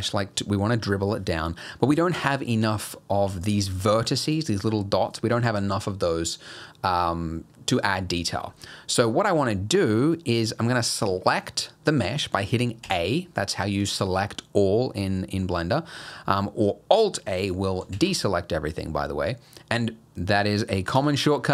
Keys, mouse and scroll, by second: 3.3 click, 3.6 click, 3.9 click, 4.3 click, 12.8 a, 17.9 alt+a, 21.0 Tab, 21.4-21.5 scroll down 2.